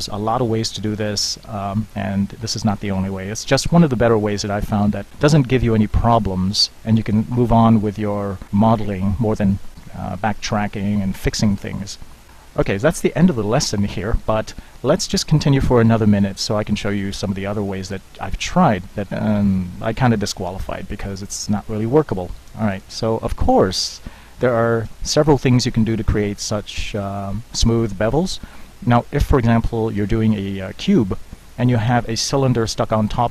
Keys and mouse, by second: 0.5-4.8 middle drag, 6.1-19.5 middle drag.